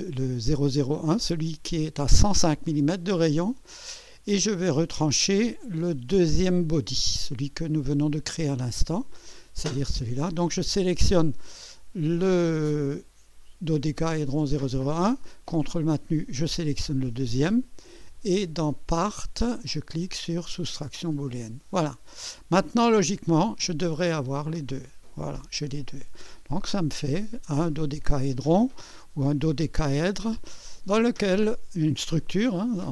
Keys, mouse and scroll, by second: 7.4-8.3 scroll down 4, 8.4 scroll up 2, 17.0 ctrl+click, 18.7 click, 19.4 click, 20.8 click, 23.5 click, 24.1 space, 24.7 click, 25.5 scroll up 1, 26.3-28.8 drag, 30.5-32.0 drag, 32.2 scroll up 1.